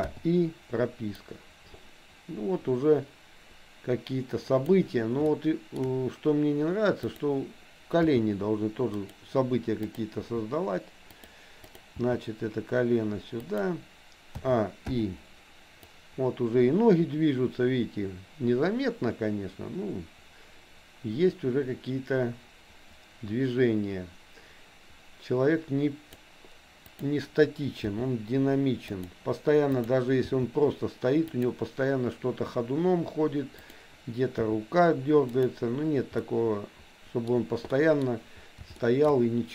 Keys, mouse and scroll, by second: 0.2 i, 1.3-4.8 drag, 5.3 shift+middle click, 7.2 click, 8.0 g, 10.0 click, 10.3 g, 11.7 click, 12.0 g, 14.4 a, 15.0 i, 15.9-26.3 drag, 26.9 click, 27.9 g, 29.8 click, 30.3 g, 33.7 click, 34.4 r, 36.2-37.3 middle drag, 37.8 middle click, 38.9 shift+middle click.